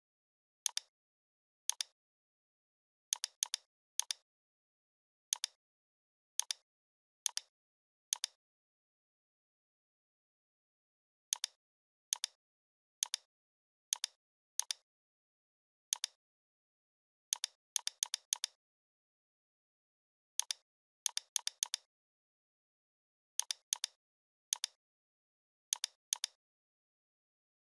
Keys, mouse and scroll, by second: 3.4 space, 3.5-3.9 click, 3.7 space, 4.0-4.6 drag, 8.3-10.5 typing, 10.1 Tab, 10.4 Tab, 10.6 Tab, 11.4 click, 14.2 click, 16.0 click, 16.7 right click, 17.4 click, 19.5 ctrl+z, 19.8 right click, 20.4 click, 20.4 click, 26.3 scroll up 1.